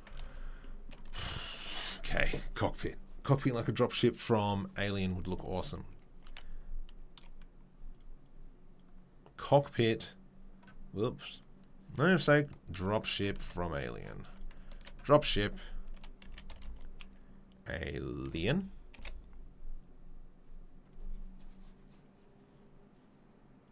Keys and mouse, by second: 8.7-23.7 middle drag.